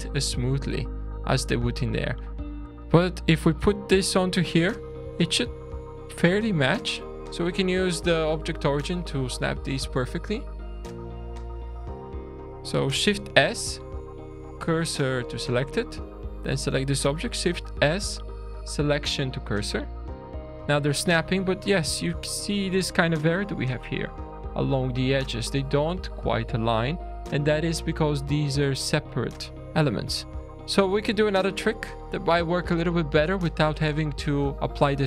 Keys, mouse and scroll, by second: 0.7 middle click, 2.7 click, 2.7-4.0 scroll down 1, 2.7 shift+d, 5.1 shift+middle click, 7.1 click, 7.1 shift+s, 7.8-8.1 scroll up 3, 8.7 scroll down 2, 10.2 click, 11.8 click, 13.0 shift+s, 16.0 click, 17.3 shift+s, 19.9 alt+a, 20.3 scroll down 2, 20.7 shift+middle click, 22.5 scroll up 3, 24.7-25.3 scroll down 4, 25.3 middle click, 26.2-26.7 scroll down 2, 26.8 scroll up 2, 27.8-28.1 scroll down 2, 29.2 scroll down 2, 29.6 shift+middle click, 30.4-31.6 scroll up 3, 31.6 click.